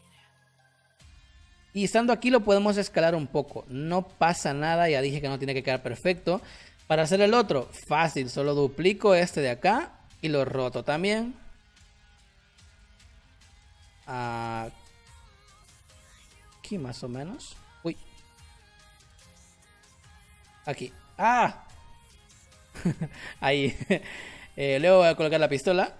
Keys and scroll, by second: 5.6 space.